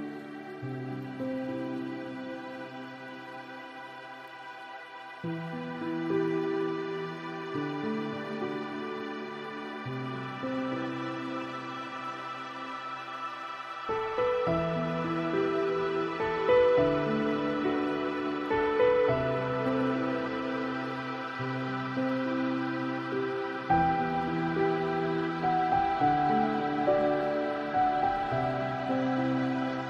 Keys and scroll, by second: 11.1 ctrl+alt+s.